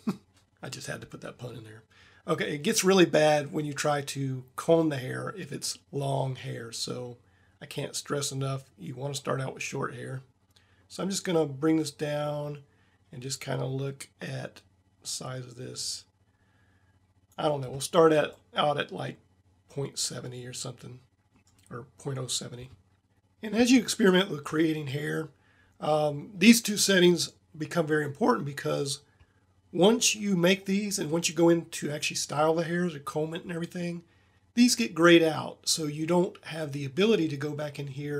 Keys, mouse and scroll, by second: 6.9-8.1 drag, 18.3 middle click, 18.6 middle click, 19.5 middle click.